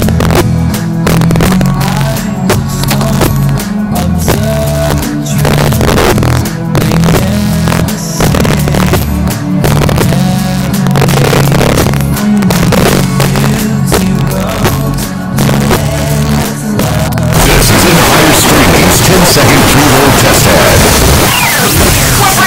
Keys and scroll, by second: 1.4 d, 1.5 Down, 2.0-2.5 Down, 2.9 Down, 2.9 Return.